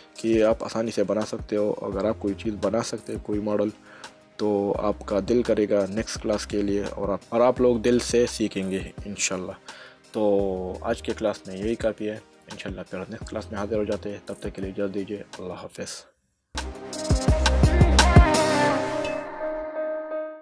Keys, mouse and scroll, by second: 11.5 middle click.